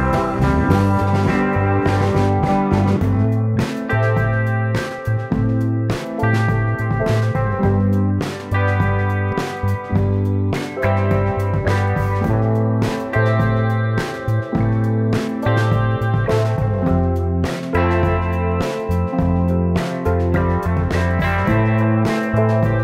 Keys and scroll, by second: 5.2-7.9 typing, 12.0 space.